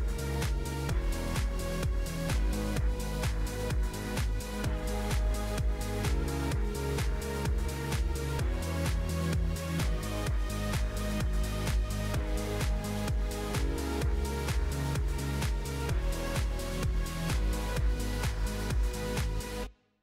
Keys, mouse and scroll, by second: 0.7 s, 1.8 g, 3.9 click, 6.0 click, 8.1 Tab, 8.7 a, 9.0 s, 11.9 s, 13.4 Tab, 15.1 click, 16.6-20.0 drag.